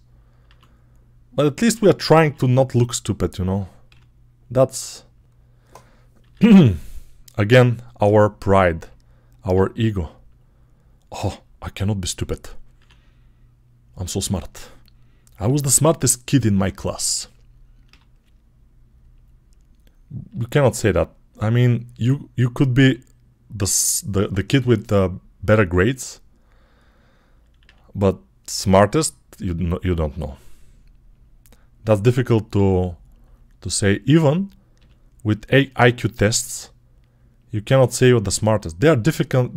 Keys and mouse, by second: 0.3 e, 2.0 s, 3.7 g, 6.0 e, 6.9-13.2 middle drag, 7.9 r, 9.4 e, 12.6 e, 15.3 g, 17.7 g, 18.5-21.9 middle drag, 20.1 g, 21.9 click, 22.6-27.5 middle drag, 22.6 g, 25.3 e, 27.5-32.6 drag, 27.5 r, 29.8 g, 32.4 e, 32.6-39.5 middle drag, 34.6 g, 36.3 g, 38.1 e.